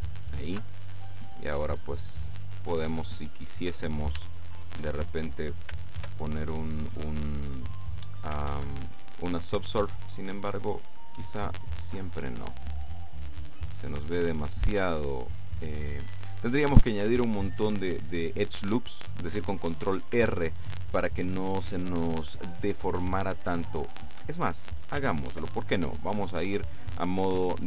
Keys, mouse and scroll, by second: 0.1 click, 0.6 Tab, 1.3 middle click, 2.2 click, 2.7-3.4 scroll up 1, 3.6 click, 4.2 shift+middle click, 4.9 shift+click, 6.1 ctrl+2, 8.6 ctrl+1, 13.4 click, 15.8 click, 25.8 ctrl+Tab.